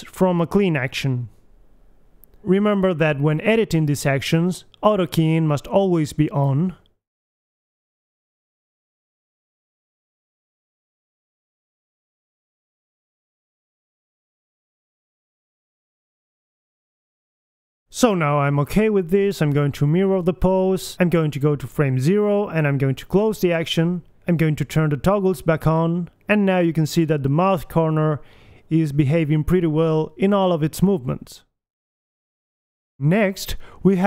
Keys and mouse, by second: 1.0 alt+g, 1.6 alt+r, 2.1 alt+s, 4.4-5.4 drag, 5.0 KP_1, 5.6 g, 7.9 middle click, 8.3 click, 8.3 g, 9.5 click, 9.6 g, 10.4 g, 10.7 click, 10.9 g, 11.4 g, 12.8 right click, 13.1 g, 14.0 right click, 14.0 g, 15.3 a, 16.6 click, 16.6 g, 17.6 KP_1, 17.8 a, 18.3 b, 19.8 click, 21.4 a, 22.8 click, 23.4-25.6 drag, 25.6-26.9 typing, 25.9 alt+g, 26.0 alt+r, 26.2 alt+s, 26.2 click, 27.0 right click, 28.6 alt+g, 28.7 KP_1, 29.2 right click, 29.9 g, 31.2 r, 32.8 alt+g, 33.0 alt+r.